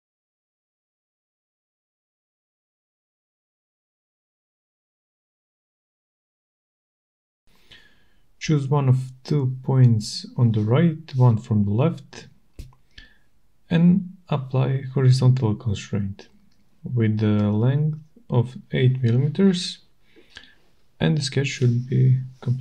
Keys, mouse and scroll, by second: 1.3 Return, 8.8 click, 9.0-9.6 scroll, 12.3 middle click, 16.6 click, 18.3 click, 21.1 click.